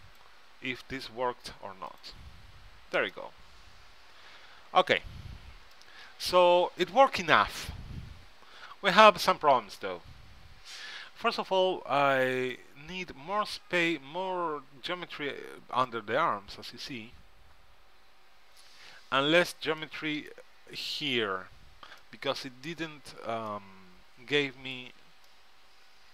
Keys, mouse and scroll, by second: 0.2-1.9 drag, 2.1-3.9 drag, 3.9-4.9 middle drag, 7.8-9.8 middle drag, 16.0-17.9 right drag, 20.0-21.6 middle drag.